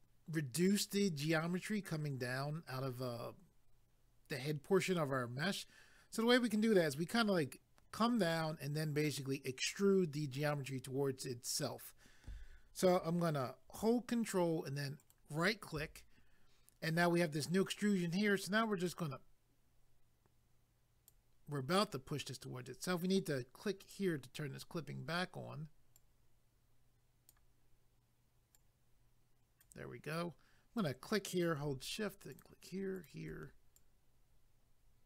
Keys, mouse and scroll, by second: 15.0 ctrl+right click, 18.9 click, 23.8 click, 26.0 click, 28.5 click, 30.8 click, 32.3 shift+click, 33.8 click.